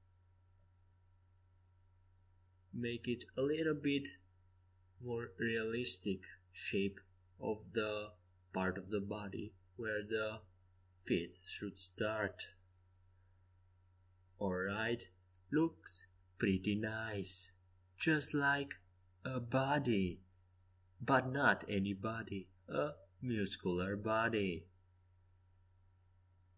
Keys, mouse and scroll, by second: 0.9 g, 4.1 a, 4.9 c, 6.4 g, 7.1 Escape, 7.7 a, 22.1-24.0 middle drag, 24.4 KP_3, 25.0 KP_1.